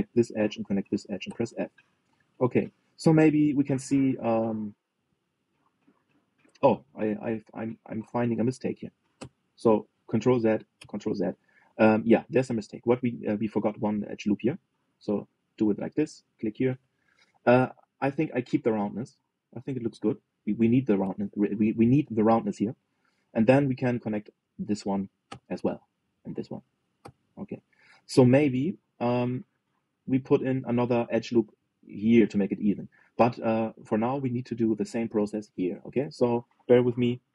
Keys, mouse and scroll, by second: 0.5 click, 1.2 shift+click, 2.0 f, 2.6 scroll down 2, 2.8 middle click, 3.6 click, 4.0 middle click, 4.5 scroll down 1, 4.7-6.3 middle drag, 6.3-6.9 scroll down 1, 6.9-7.3 scroll up 2, 7.3 shift+middle click, 7.8 scroll up 2, 8.3-9.9 middle drag, 9.9 ctrl+z, 11.5 ctrl+z, 12.0-15.4 middle drag, 15.4 ctrl+r, 18.3-20.8 middle drag, 21.0-23.3 middle drag, 23.3 scroll up 1, 23.4-24.7 middle drag, 24.7 click, 25.5 shift+click, 26.0 f, 26.7 click, 27.3 shift+click, 27.7 f, 28.1-28.4 scroll down 3, 28.4 middle click, 29.0 scroll down 2, 29.6 click, 30.0 scroll down 1, 30.2 middle click, 30.7 scroll down 2, 31.2-34.5 middle drag, 34.5-35.4 scroll up 2, 35.4 middle click, 36.3 scroll up 2.